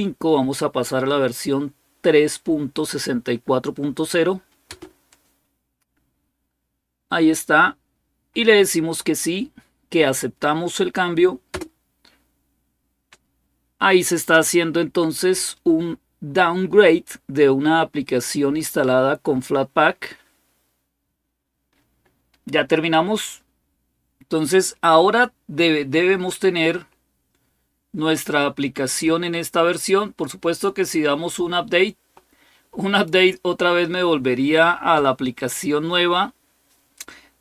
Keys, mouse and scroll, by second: 4.5 Return, 11.3 Return, 26.0-27.6 scroll up 1, 30.6-31.8 scroll down 3, 32.7 click.